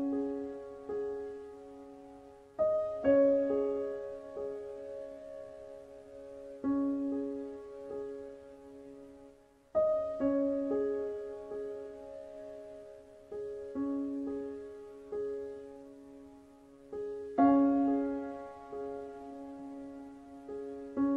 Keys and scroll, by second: 2.4 ctrl+shift+c, 4.2 ctrl+v, 11.7 Down.